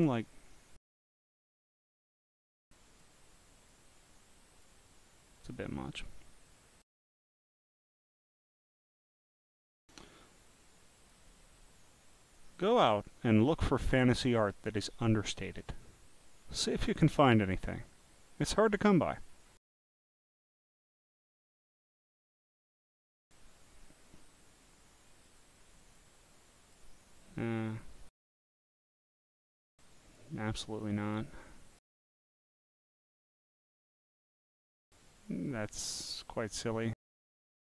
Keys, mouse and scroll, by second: 0.0 scroll down 1, 2.9 click, 3.7 click, 5.5 click, 9.2 scroll down 1, 9.2 scroll down 1, 11.0 click, 12.2 click, 12.9 scroll down 4, 13.7 scroll down 3, 15.8 scroll down 4, 16.4 scroll down 1, 17.5 scroll down 1, 17.6 scroll up 1, 18.8-19.4 scroll up 4, 19.9 scroll up 1, 20.0 scroll, 21.5 scroll, 22.4 scroll, 22.6 scroll down 2, 25.3 click, 25.9 click, 27.7 click, 29.1 click, 30.0 click, 31.1 click, 32.1 scroll up 5, 34.1 click, 36.1 click.